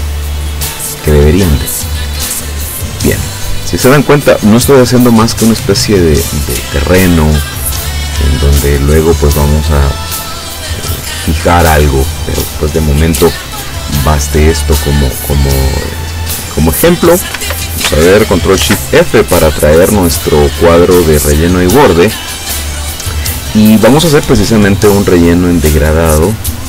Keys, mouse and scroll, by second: 3.5 click, 6.7 click, 8.7 click, 10.6 click, 14.5 click, 18.7 ctrl+shift+f, 21.2 click, 25.1 click.